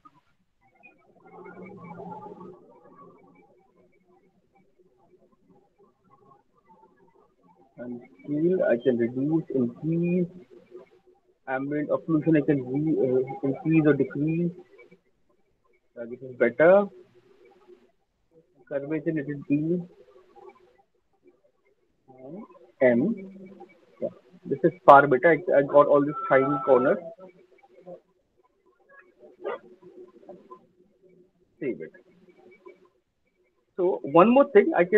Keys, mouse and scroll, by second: 0.0 alt+middle click, 0.4 alt+click, 1.4 alt+middle click, 1.8 alt+click, 2.6 click, 3.1 click, 3.3 alt+click, 4.1 alt+right click, 4.1 click, 4.5 click, 9.4 click, 9.6-10.9 scroll down 2, 13.3 middle click, 16.4 click, 16.8 middle click, 18.6 middle click, 19.1 middle click, 19.5-20.5 scroll, 20.5-20.9 scroll, 22.7 alt+click, 23.0 m, 23.9 alt+right click, 24.4-25.0 alt+scroll, 24.8-26.2 alt+middle click, 25.0 alt+click, 27.1 alt+middle click, 28.2 alt+click, 28.7 ctrl+s, 31.7 alt+click, 32.6 alt+click, 32.6 alt+right click, 32.7 alt+middle click, 33.7 alt+click.